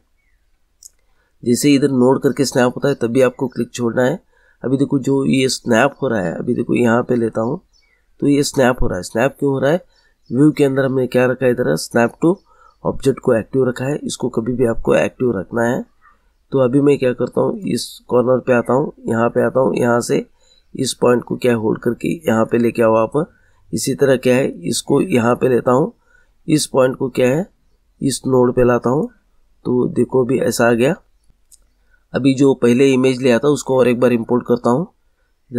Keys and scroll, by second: 31.3 Delete.